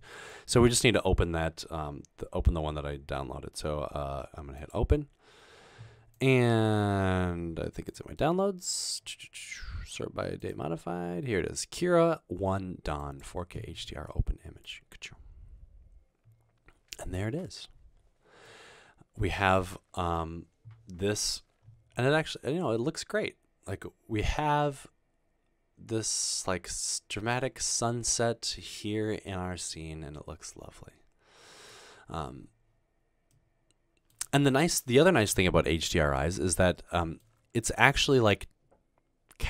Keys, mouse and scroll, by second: 4.6 click, 6.2 click, 9.4 scroll down 2, 9.4-10.0 scroll up 2, 14.7 click, 18.5-20.3 middle drag, 21.1-22.9 scroll down 3, 22.9-26.4 middle drag, 32.1-34.3 middle drag, 32.1-33.6 scroll down 1, 36.6 middle click.